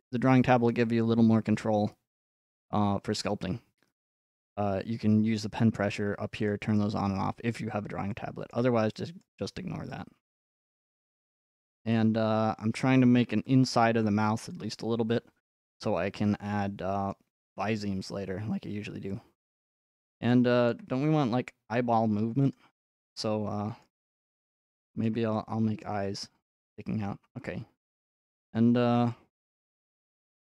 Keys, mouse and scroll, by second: 6.5-8.5 drag, 8.5-11.3 shift+middle drag, 11.8-13.7 drag, 14.7 middle click, 14.8 middle click, 17.1 middle click, 18.3 middle click, 18.4 middle click, 18.7 middle click, 18.8 middle click, 19.2-20.3 scroll, 20.7 shift+middle click, 21.2-22.1 scroll, 22.1 f, 22.6 click, 23.8 click, 25.0 middle click, 25.3 middle click, 25.8-26.4 scroll, 27.4 scroll, 28.0 scroll, 29.3 shift+middle click, 30.3 click.